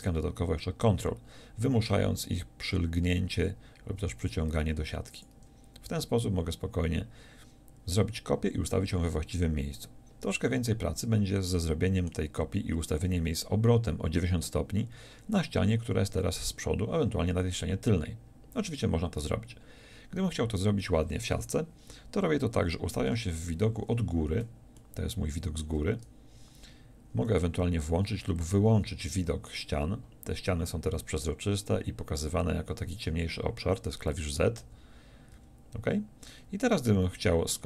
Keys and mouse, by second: 5.3-23.1 drag, 23.1 KP_7, 26.3-28.5 drag, 28.5 z, 34.6 z, 35.3 z.